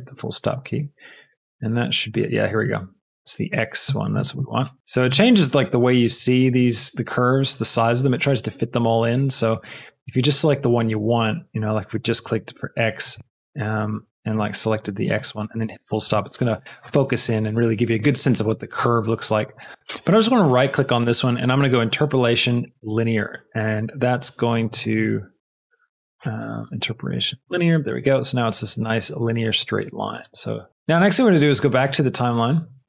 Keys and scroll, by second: 13.0 a, 13.9 b, 14.7 b, 30.2 space.